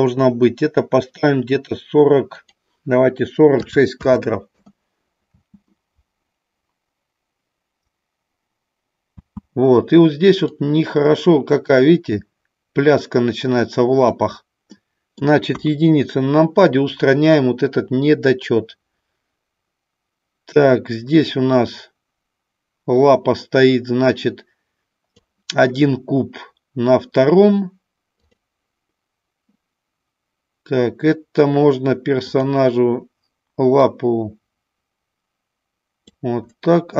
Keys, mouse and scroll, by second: 2.4-4.8 drag, 5.1 space, 9.1 space, 10.5-14.1 drag, 14.6 middle click, 15.5 KP_1, 18.4-25.2 drag, 28.2 click, 32.3 click, 33.7-36.0 drag.